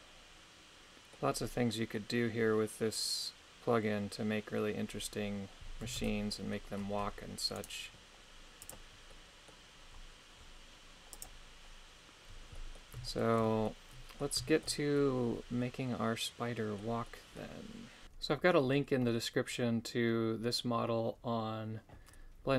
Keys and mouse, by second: 6.0 shift+space, 7.6 right click, 8.6 click, 9.1-11.1 middle drag, 11.1 click, 12.5 middle click, 13.0 shift+middle click, 13.6 middle click, 14.5 shift+middle click, 14.9-16.8 middle drag, 17.0 middle click.